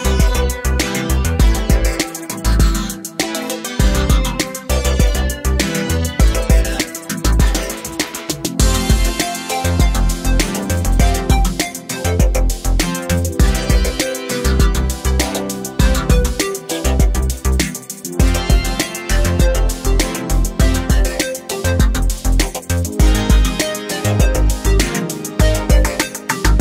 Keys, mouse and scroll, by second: 0.2 click, 0.9 scroll up 1, 1.6 scroll down 1, 3.3 F4, 4.7 F8, 5.5 F9, 8.9 F9, 9.4 click, 10.9 click, 12.5 ctrl+o, 13.4 scroll down 1, 16.2-17.9 scroll down 1, 19.1 click, 23.6 F4, 25.4 F9.